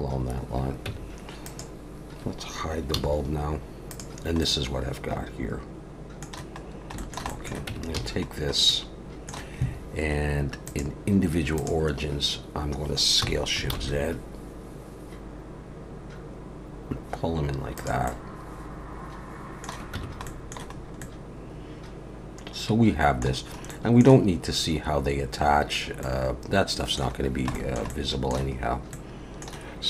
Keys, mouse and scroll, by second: 0.9 Tab, 1.4 click, 2.9 h, 3.9 click, 4.4 middle click, 6.7 scroll down 1, 7.0 shift+middle click, 7.3 middle click, 7.7 Tab, 7.9 a, 8.4 scroll up 2, 8.7 middle click, 10.7 click, 13.2 s, 18.0 middle click, 19.9 Tab, 20.2 middle click, 20.8 scroll up 2, 21.0 middle click, 23.4 scroll down 2, 23.7 middle click, 26.0 middle click, 27.2 scroll down 1, 27.5 shift+middle click, 27.9 middle click, 28.6 scroll up 2, 28.9 middle click.